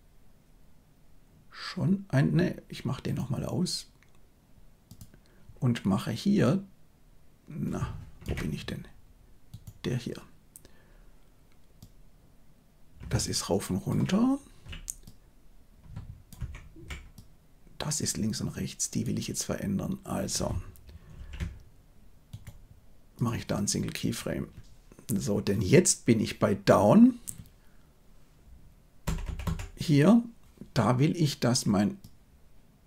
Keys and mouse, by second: 3.0-4.9 middle drag, 6.4-8.1 drag, 8.2 Escape, 11.9-13.8 drag, 15.1-16.3 drag, 16.3 Escape, 17.2-18.9 drag, 21.1 ctrl+z, 22.2 right click, 29.0 Right, 29.2 Right, 29.4 Right, 32.1-32.8 drag.